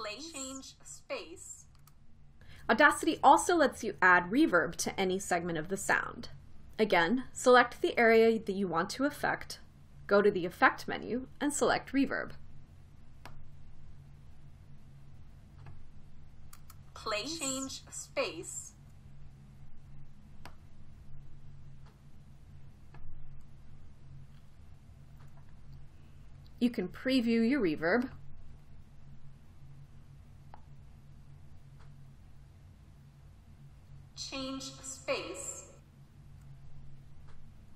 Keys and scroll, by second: 17.2 space.